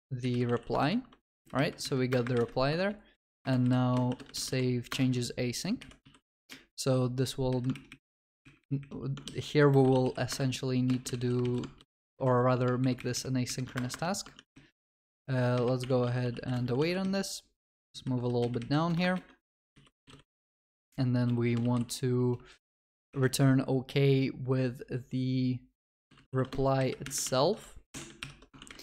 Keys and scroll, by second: 10.3 Return, 13.7 Return, 26.5 Return, 28.2 Return, 28.6 ctrl+s.